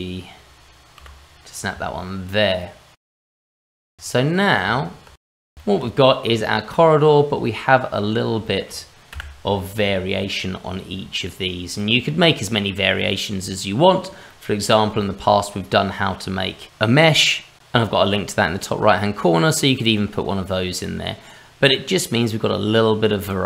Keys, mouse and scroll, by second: 1.0 g, 1.7 scroll down 2, 2.6 middle click, 3.0 scroll up 2, 3.1 middle click, 3.4 Tab, 3.6 Tab, 3.8 click, 3.9 click, 4.0 shift+middle click, 4.1 click, 4.7 click, 5.2 Return, 5.3 Delete, 5.6 shift+middle click, 6.0 scroll down 1, 6.3 middle click, 7.4 middle click, 7.6 shift+middle click, 8.4 middle click, 9.1 n, 11.8 middle click, 14.3 middle click, 15.0 shift+middle click, 20.8 middle click, 21.7-23.4 scroll down 1.